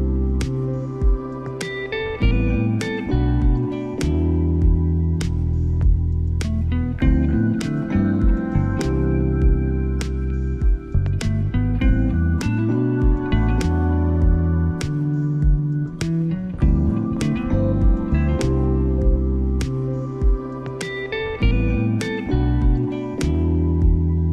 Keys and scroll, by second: 0.7 ctrl+t, 8.5 ctrl+t.